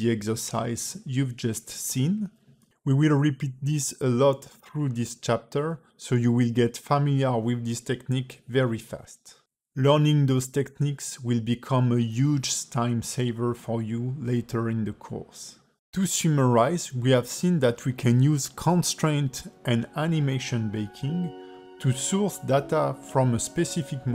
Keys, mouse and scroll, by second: 0.1 click, 1.5 click, 4.4 click, 5.3 click, 5.8 click, 6.3 click, 7.3 x, 7.4 click, 9.1 middle click, 11.8 ctrl+z, 12.2 ctrl+z, 13.0 click, 13.3 click, 14.3 click, 14.7 click, 15.4 x.